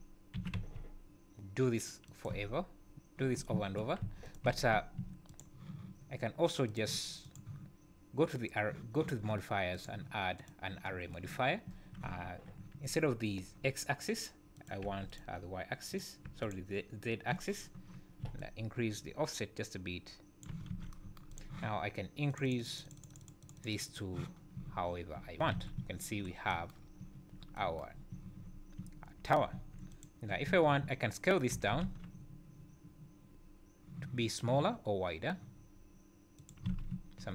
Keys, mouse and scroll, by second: 0.3 shift+d, 2.3 z, 4.0 x, 4.4 Tab, 4.9 `, 5.2 click, 6.6 click, 7.2 click, 9.7 click, 11.4 scroll down 3, 11.6 `, 14.5 click, 15.9 click, 18.3 shift+click, 20.7 alt+a, 21.2-23.8 click, 22.2 click, 22.4 click, 22.7 click, 22.8 click, 23.1 click, 23.2 click, 23.5 click, 23.8 click, 24.3 scroll down 3, 25.1 `, 25.6 alt+a, 25.8 `, 26.8 scroll up 4, 27.0 `, 27.9 scroll down 5, 28.1 `, 28.5 scroll up 2, 28.8 `, 29.5 `, 29.9 click, 30.3 `, 31.5 s, 36.7 alt+a, 36.9 `.